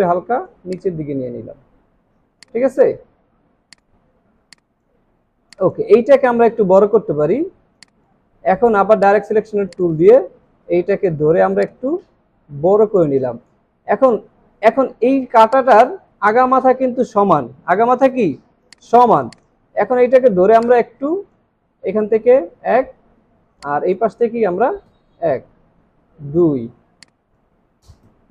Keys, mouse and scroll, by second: 1.4 alt+scroll up 1, 2.4 space, 4.2 alt+scroll down 1, 5.0 alt+scroll up 1, 14.3-14.7 scroll up 1, 19.1 space, 19.8 alt+scroll up 1, 22.2 Left, 25.9 Right, 28.0 Left.